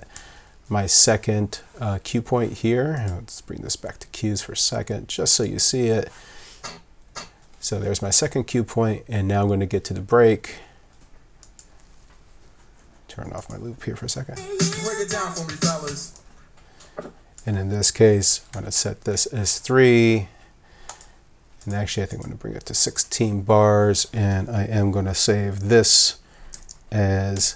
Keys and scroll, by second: 0.1 2, 6.6 2, 7.1 2, 14.3 w, 16.0 w, 18.5 3, 27.3 alt+2.